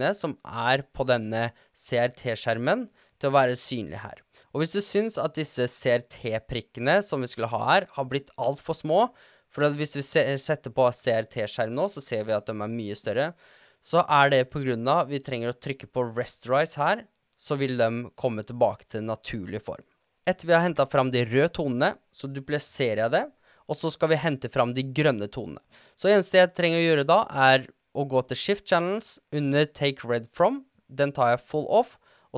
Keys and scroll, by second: 22.7 super+d.